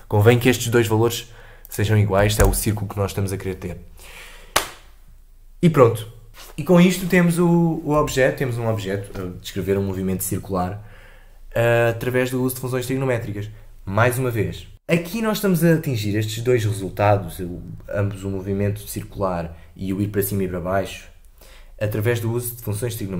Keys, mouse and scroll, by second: 1.6-4.7 drag, 6.3 Delete, 7.9 space.